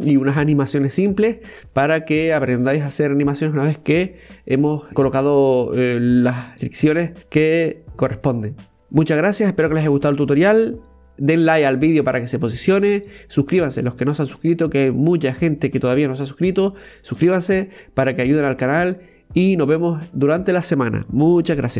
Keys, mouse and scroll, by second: 3.9 right click, 6.1-6.7 drag, 7.6 g, 12.7 ctrl+z, 15.2 right click, 18.8 z, 21.3 a.